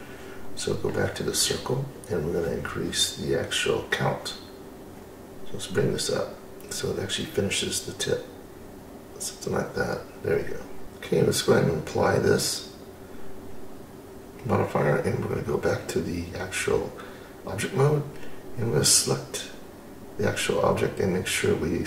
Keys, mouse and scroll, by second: 1.2 scroll up 1, 1.4 middle click, 2.3-2.9 scroll up 1, 2.9-4.4 scroll down 2, 4.4 middle click, 5.5-7.5 scroll up 1, 9.6-10.8 drag, 10.8-12.4 scroll up 1, 13.3-15.7 drag, 18.1-21.8 drag.